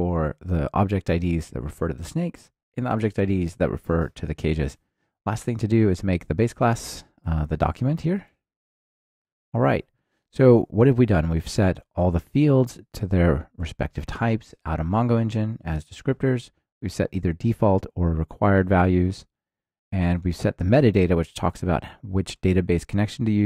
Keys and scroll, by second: 4.4 alt+super+l, 6.9 Return.